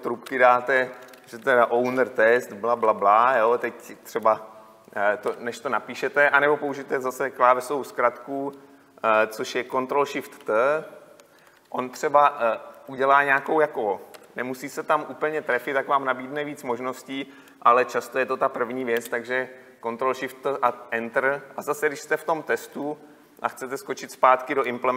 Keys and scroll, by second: 17.5 ctrl+shift+t.